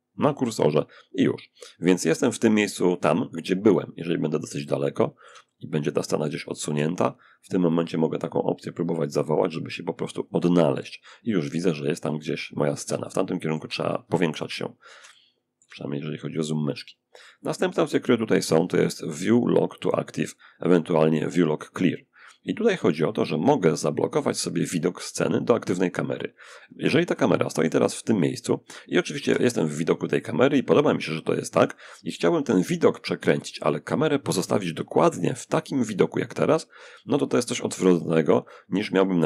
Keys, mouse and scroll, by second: 3.1 scroll up 1, 3.2 middle click, 3.8-6.4 middle drag, 7.0 click, 9.5 click, 11.3-12.1 scroll up 1, 12.1 shift+scroll up 1, 12.3-15.4 shift+middle drag, 15.6 shift+click, 26.3-27.9 middle drag, 28.4 0, 38.7 shift+f.